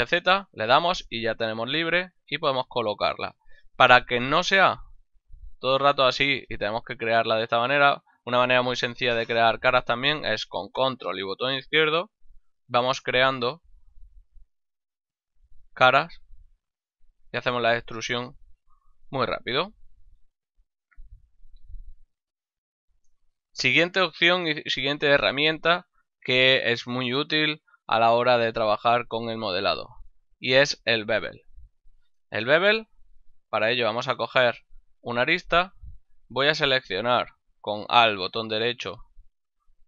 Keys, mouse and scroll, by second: 0.3 z, 4.6 e, 6.2 click, 6.5 shift+middle click, 9.2 ctrl+middle click, 9.8 shift+middle click, 11.8 ctrl+click, 20.4 middle click, 23.1 shift+middle click, 23.7 ctrl+middle click, 24.5 shift+middle click, 29.5 middle click, 32.2 ctrl+middle click, 32.7 ctrl+Tab, 33.6 click, 34.0 shift+middle click, 35.2 right click, 38.9 alt+right click.